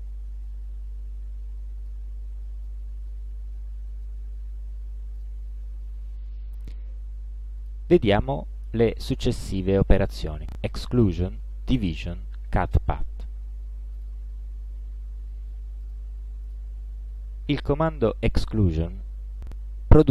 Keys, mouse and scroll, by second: 2.4 ctrl+d, 2.7-4.3 ctrl+drag, 5.2 ctrl+click, 7.6 click, 14.0 click, 15.9 click, 16.6 shift+click, 17.8 click, 18.8 click.